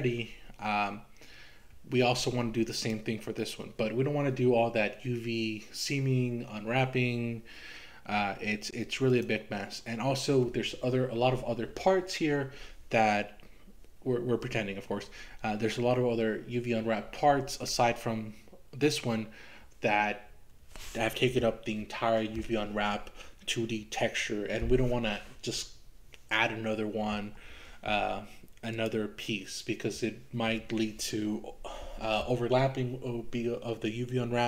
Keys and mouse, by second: 2.8 click, 9.1 click, 28.7 click.